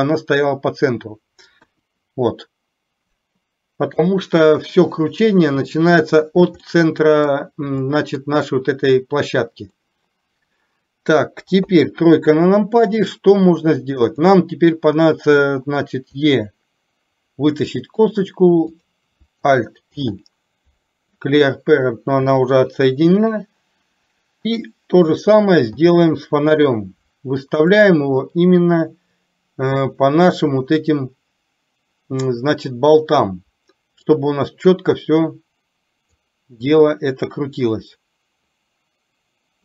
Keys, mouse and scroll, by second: 1.8 KP_1, 6.8 middle click, 7.9 scroll up 1, 8.1 middle click, 10.0 scroll up 1, 10.2 middle click, 11.6 KP_3, 16.3 e, 20.0 alt+p, 22.3 r, 25.9 g, 35.0-36.3 drag, 36.8-39.6 middle drag.